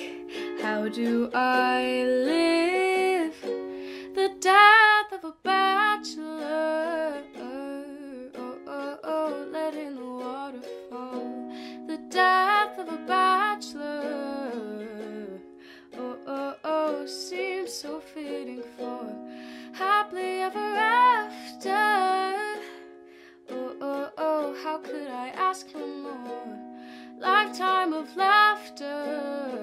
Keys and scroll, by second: 9.5-10.4 typing, 11.6-12.3 typing, 24.0 alt+[.